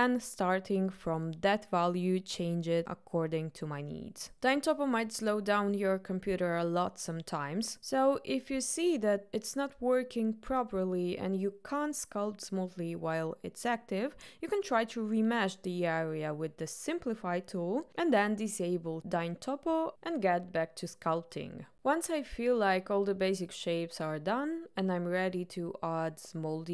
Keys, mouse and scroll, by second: 14.9 click, 16.4 middle click, 16.8 click, 18.0 middle click, 18.7 click, 18.9 shift+middle click, 19.7 click, 20.6 click, 20.8 click, 21.1 middle click, 21.2 click, 21.7 middle click, 21.8 click, 22.0 middle click, 22.9 middle click, 23.7 middle click, 24.3 click, 25.4 middle click, 25.7 click, 26.1 middle click, 26.4 click.